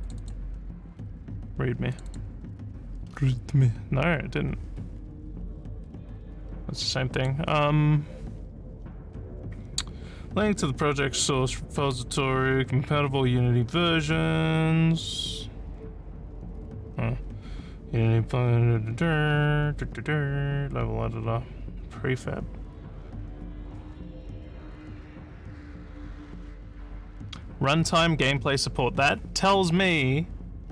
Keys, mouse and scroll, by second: 0.0 click, 1.9 click, 2.1 click, 3.1 scroll, 6.2 scroll up 1, 7.1 click.